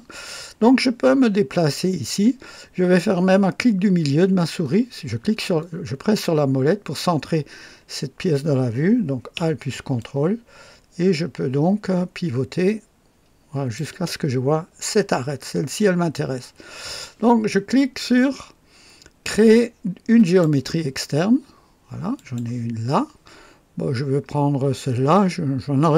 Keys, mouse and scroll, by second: 1.1-1.4 scroll up 2, 4.0 middle click, 5.3 middle click, 9.9-13.9 ctrl+alt+drag, 15.4-16.2 scroll up 4, 20.2 click, 22.1 click, 25.7 click.